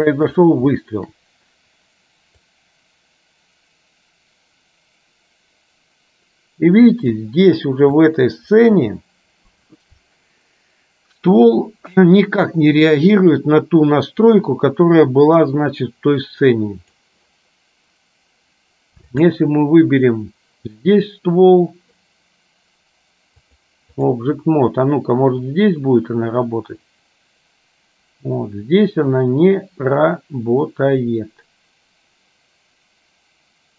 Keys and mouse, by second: 0.8 shift+middle click, 2.6-7.4 drag, 8.1 shift+middle click, 13.5-17.1 drag, 19.3 click, 23.5 click, 25.6-33.7 drag.